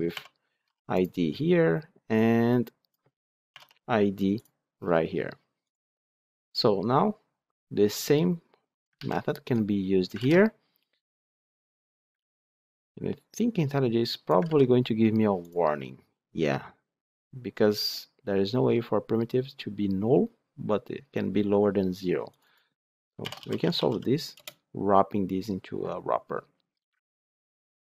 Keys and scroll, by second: 8.9 ctrl+c, 10.1 ctrl+v, 12.1 ctrl+c, 14.3 ctrl+v, 24.3 Return.